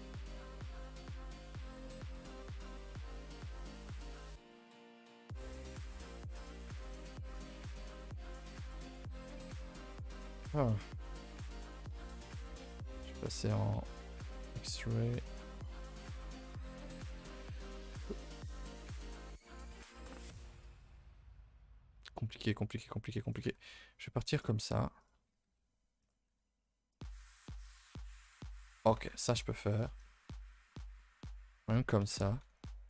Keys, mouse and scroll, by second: 2.9 click, 9.3 click, 9.6 click, 12.8-16.1 drag, 20.5 click, 25.0 click, 27.9 click, 29.7 click, 30.6 click, 32.5 click.